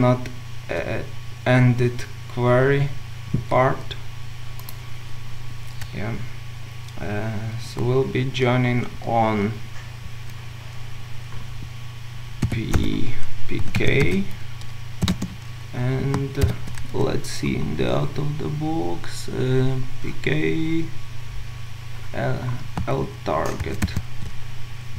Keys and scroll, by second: 14.1 Return, 16.4 Return, 16.5 ctrl+u, 23.7 ctrl+alt+Left.